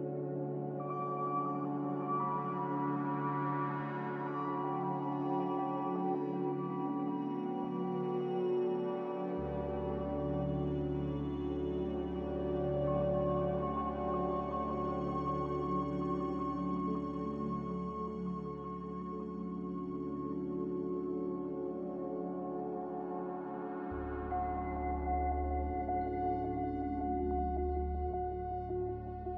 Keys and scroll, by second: 11.5 z, 13.5 z.